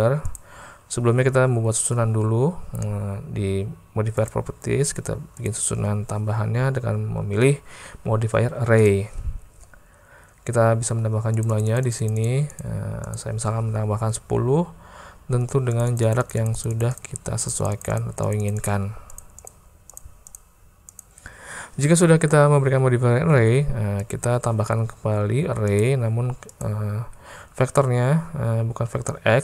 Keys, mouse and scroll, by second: 0.4 click, 4.2 click, 5.5-8.9 drag, 11.4 click, 12.5 click, 13.1 click, 15.7-16.9 drag, 17.0 click, 17.4 click, 18.3 click, 19.2 click, 19.4 click, 20.4 click, 20.9 click, 21.9 middle click, 22.0 click, 23.4 alt+a, 25.7-26.7 drag.